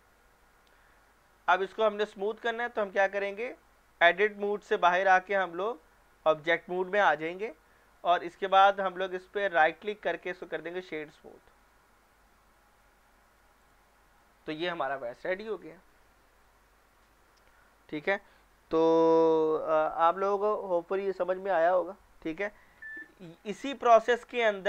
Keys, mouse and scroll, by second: 1.1-1.7 middle drag, 4.3 Tab, 8.0 middle click, 8.4 click, 9.7 right click, 10.4 click, 11.1-11.6 scroll down 1, 11.6-13.4 middle drag, 13.6 click, 13.9 middle click, 14.5-16.3 scroll up 1, 23.4 scroll down 1.